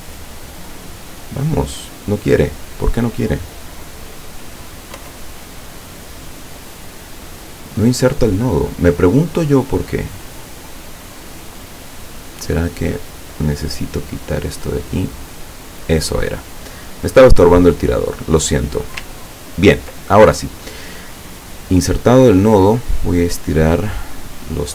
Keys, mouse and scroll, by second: 0.8 click, 4.8 click, 5.0 Insert, 5.4-7.0 drag, 9.9 click, 11.1 click, 12.6 click, 14.1 click, 15.2 click, 16.9 click, 17.7 click, 19.4-20.5 ctrl+scroll down 1, 22.6-24.3 drag.